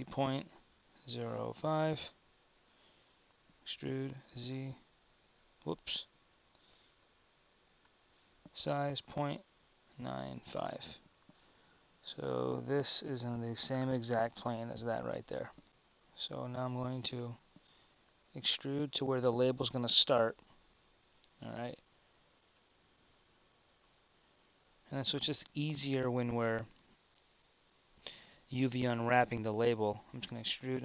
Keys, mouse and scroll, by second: 3.6 e, 7.3 super+z, 8.5 s, 15.6 Tab, 15.6 z, 17.3 e, 22.9-30.4 middle drag, 30.4 e.